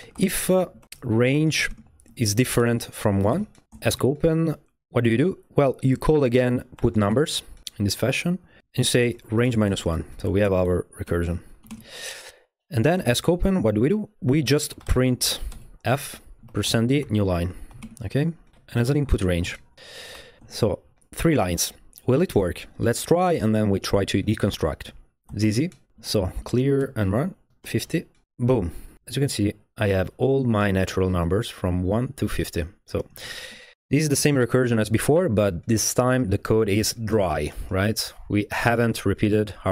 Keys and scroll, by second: 0.0-3.9 typing, 3.7 Escape, 6.3-11.7 typing, 11.6 Left, 13.0 Escape, 13.1 o, 14.4-20.9 typing, 15.5 Return, 25.1-28.3 typing, 26.8 Return, 33.9 v, 34.0 Right, 34.2 Return.